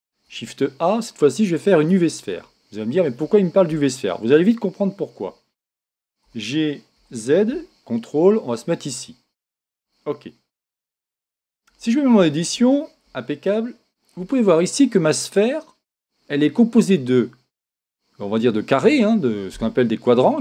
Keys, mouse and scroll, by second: 0.2 shift+a, 2.4-4.3 middle drag, 3.7 KP_1, 6.2 g, 9.6 click, 10.3-11.3 middle drag, 11.7 Tab, 11.8-17.2 middle drag, 13.0 a, 17.4-19.3 scroll up 1, 20.0-20.4 middle drag.